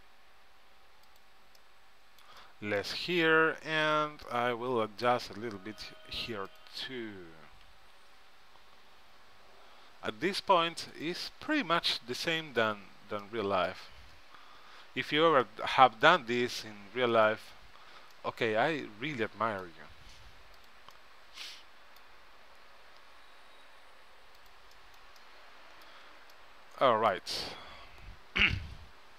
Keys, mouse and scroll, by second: 1.7 middle click, 4.0-5.7 middle drag, 5.7 click, 6.7-8.3 drag, 7.5 s, 11.5-15.7 middle drag, 17.3-19.0 drag, 18.3 middle click, 18.3 right click, 18.9 right click, 19.0 middle click, 20.8-22.4 drag, 21.1 middle click, 22.6 s, 27.8 Tab.